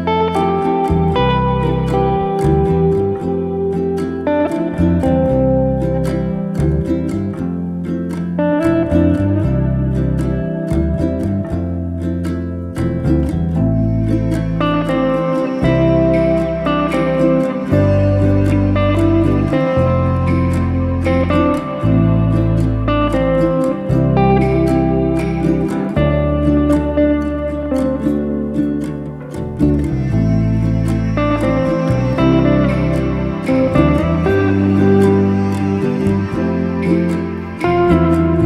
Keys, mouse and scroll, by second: 1.9 click, 2.5 g, 4.0-4.4 middle drag, 4.4 Tab, 4.8 shift+z, 5.0 scroll down 2, 5.2-6.4 middle drag, 6.4 click, 7.9 drag, 8.2-9.7 middle drag, 9.7 alt+z, 10.2 Tab, 10.4-11.9 middle drag, 12.0 click, 13.1 shift+click, 13.6 shift+click, 14.8 ctrl+a, 17.2 ctrl+a, 18.8 ctrl+z, 19.0 ctrl+z, 19.6 click, 20.5 ctrl+a, 22.6 click, 23.1 ctrl+a, 24.5 click, 25.0 ctrl+a, 26.1 click, 26.6 ctrl+a, 28.0 click, 28.5 ctrl+a, 30.0 click, 30.4 ctrl+a, 31.8 click, 32.3 ctrl+a, 33.3 click, 33.6 ctrl+a, 35.4 click, 35.8 ctrl+a, 37.5 click, 37.9 ctrl+a.